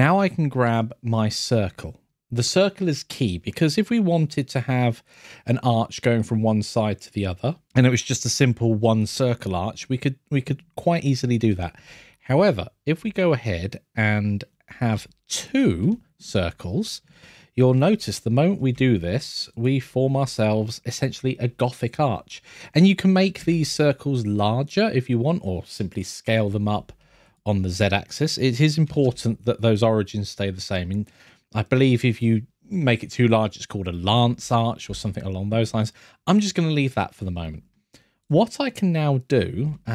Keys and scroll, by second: 27.7 scroll, 37.3 scroll.